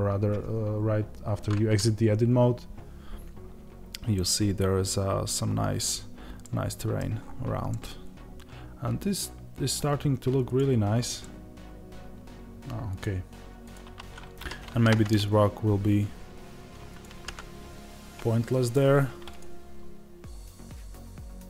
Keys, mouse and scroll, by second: 6.3-10.5 middle drag, 7.1 scroll up 1, 10.5 click, 11.2-12.2 middle drag, 12.2 g.